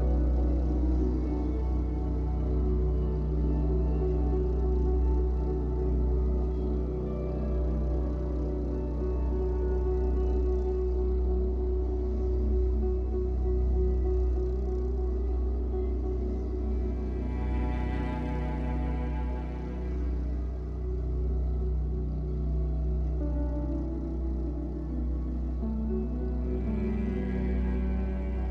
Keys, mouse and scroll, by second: 0.4 f, 0.7 scroll down 1, 0.9-4.7 middle drag, 1.9 z, 3.5 scroll up 1, 4.7 click, 5.5 click, 6.8-8.7 drag, 8.8-9.3 scroll up 1, 9.3 click, 10.2 middle click, 11.1 click, 11.6-13.3 middle drag, 12.5 z, 13.3 click, 13.6 z, 14.1-15.2 drag, 15.2 scroll down 1, 15.4 middle click, 16.3-17.6 drag, 18.4 scroll down 1, 18.5-28.5 middle drag, 19.1 Tab, 19.3 scroll down 1, 20.1 scroll up 1, 22.7-23.1 scroll down 1, 23.4 KP_1, 23.7 z.